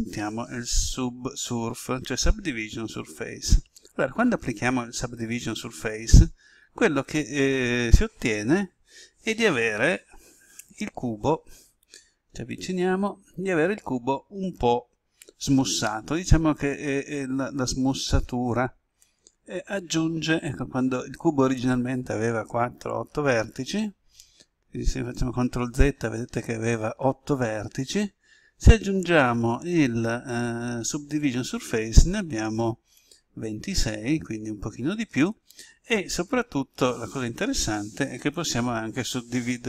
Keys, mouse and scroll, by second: 11.9 scroll up 1, 25.4 ctrl+z, 28.8 click.